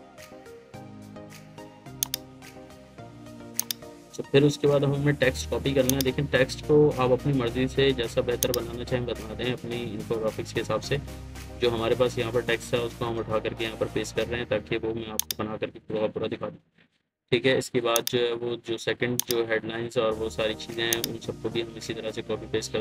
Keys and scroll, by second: 7.1 ctrl+c, 9.6 ctrl+v.